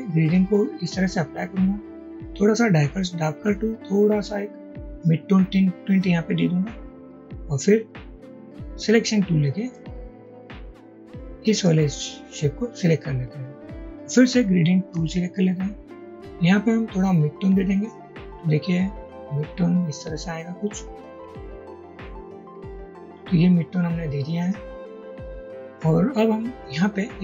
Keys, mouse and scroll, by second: 9.8 v, 15.0 g, 24.8 double click.